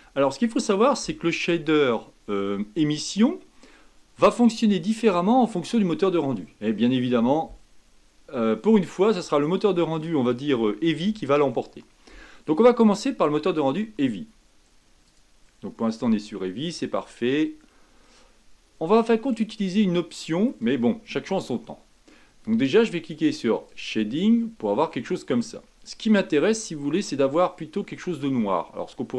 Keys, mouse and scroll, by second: 1.9-5.0 middle drag, 15.0 click, 18.1-21.2 middle drag, 23.7 click, 26.6-29.1 middle drag.